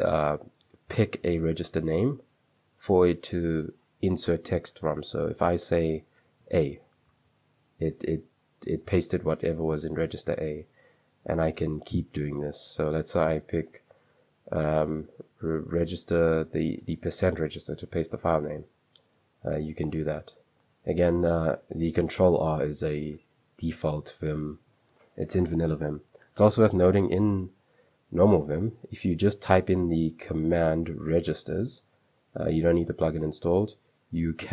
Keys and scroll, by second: 6.5 typing, 11.6 ctrl+r, 11.6 space, 18.1 %, 20.7 Escape, 22.7 u, 23.2 u, 29.2-32.3 typing.